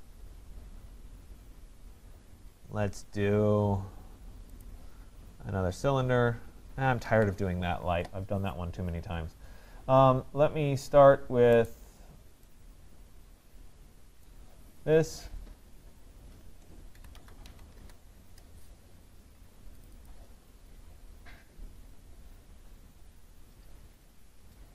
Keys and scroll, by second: 7.1 Escape, 17.7 Return.